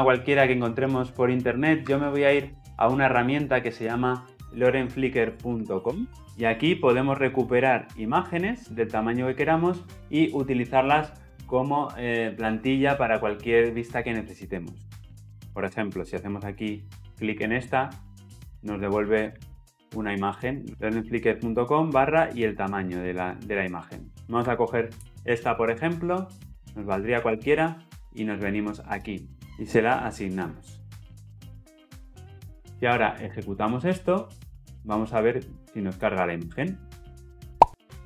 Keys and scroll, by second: 29.3 ctrl+z, 31.5 ctrl+v, 35.9 shift+F10.